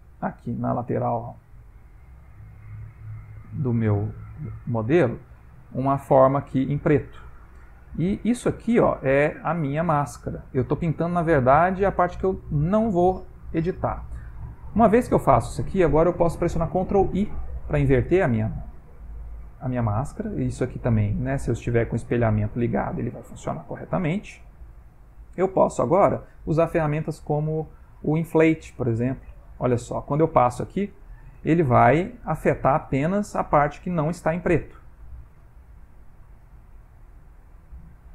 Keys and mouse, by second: 0.4 click, 1.7 click, 2.2 click, 3.5 click, 5.4 click, 6.0 click, 6.8 click, 7.6 click, 11.1 click, 14.9 click, 17.4 ctrl+i, 18.9 middle click, 22.3 middle click, 24.1 shift+middle click, 24.7 middle click, 27.2 i, 28.3 click, 35.7 middle click, 36.5 ctrl+middle click, 37.1 middle click.